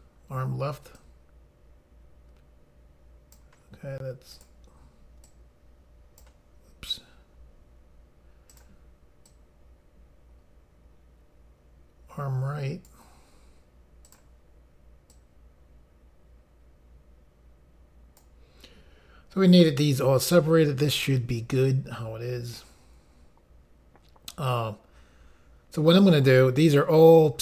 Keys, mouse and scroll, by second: 1.1 click, 4.4 click, 5.4 click, 8.6 click, 9.4 click, 14.2 click, 15.2 click.